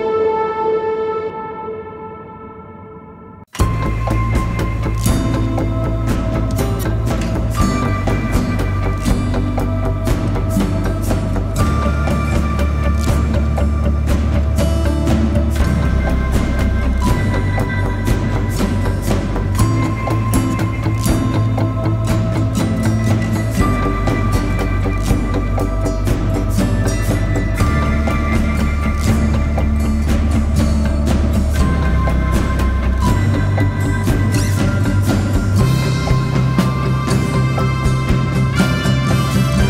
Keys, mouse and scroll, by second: 7.5 e, 33.8-36.8 typing, 37.4 double click, 37.8-38.8 typing, 38.3 double click.